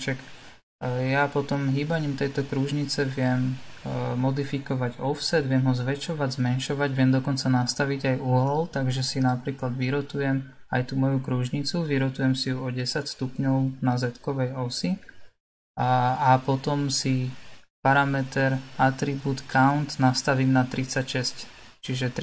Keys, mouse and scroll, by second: 1.0 click, 2.8 g, 15.2-17.5 scroll down 4, 17.5 click, 19.4-22.2 drag.